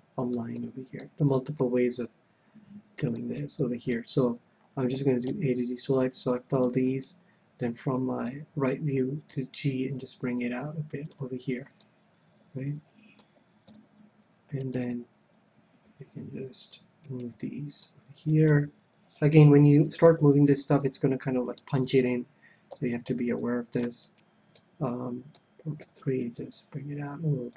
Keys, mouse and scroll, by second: 3.3-4.9 middle drag, 4.9 a, 5.3 c, 7.0-8.8 right drag, 8.2 KP_3, 9.3 g, 11.1-12.6 drag, 11.2 a, 11.8-13.5 middle drag, 12.7 click, 13.7 KP_1, 14.6-16.5 right drag, 15.9 g, 16.7-22.2 drag, 17.0-21.5 right drag, 17.3 g, 18.6 g, 20.3 g, 20.9-22.4 middle drag, 22.7 a, 23.1 c, 24.1-25.8 right drag, 24.6-26.1 middle drag, 25.9 KP_3, 26.2 middle click, 26.4 g.